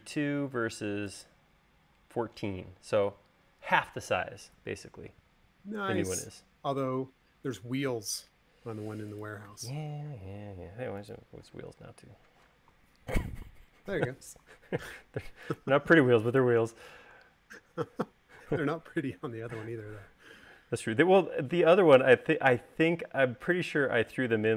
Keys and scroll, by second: 19.2 s.